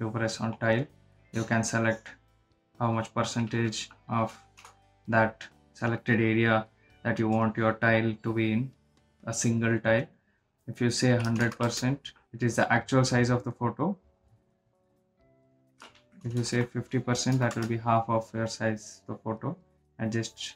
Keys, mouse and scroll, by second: 4.7 Right, 12.2 Num_Lock, 16.0 Num_Lock, 16.1 click, 17.3 Right, 19.8-20.5 drag.